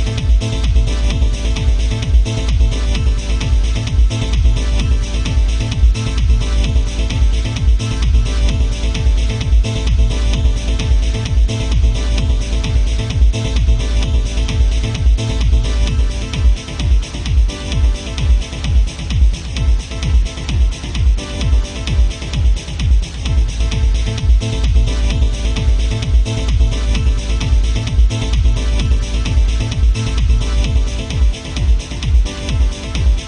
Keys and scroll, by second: 3.6 ctrl+z, 6.7 ctrl+z, 13.3 ctrl+z, 20.8 ctrl+z, 22.3 ctrl+z, 22.8 ctrl+z, 23.3 ctrl+z, 25.3 ctrl+z, 27.8 ctrl+z, 30.6 alt+space.